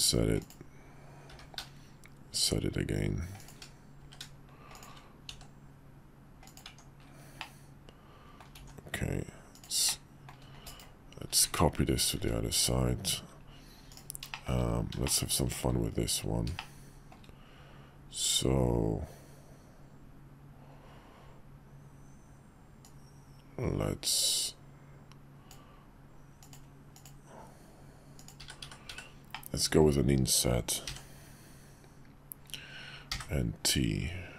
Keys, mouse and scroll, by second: 1.3 i, 4.0 e, 5.3 s, 6.6 Tab, 7.4-8.4 middle drag, 8.6 alt+x, 9.5 click, 9.9 click, 11.4 `, 12.1 `, 12.8 KP_5, 13.9 click, 14.3 shift+middle click, 15.0-15.5 shift+middle drag, 16.5-17.1 shift+middle drag, 22.8-25.5 drag, 29.3-29.8 middle drag.